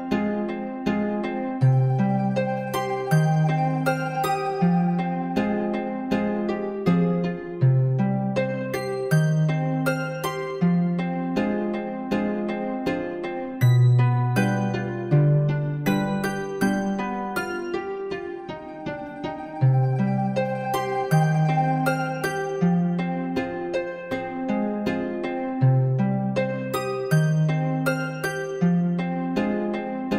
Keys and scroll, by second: 12.0 ctrl+-.